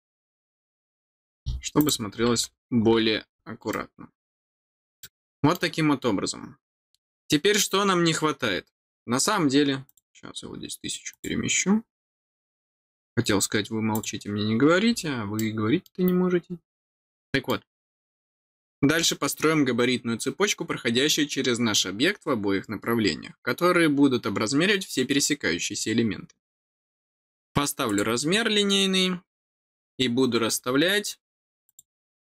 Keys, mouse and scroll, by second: 0.8-1.4 scroll down 2, 1.7 click, 2.8-3.1 scroll down 2, 3.7 middle click, 5.0 middle click, 7.3 scroll down 1, 9.3 scroll down 1, 9.8 click, 11.1 click, 12.4 scroll up 1, 12.6 scroll down 1, 12.7 scroll up 1, 13.9 click, 15.3 middle click, 17.0 middle click, 17.9-18.5 scroll down 1, 27.8 click, 31.6 click.